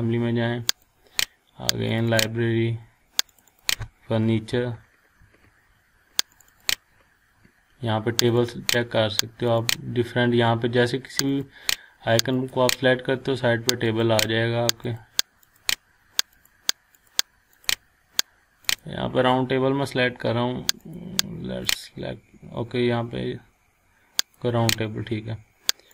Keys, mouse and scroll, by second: 4.4-5.2 typing, 6.3 click, 8.6 click, 24.2 click.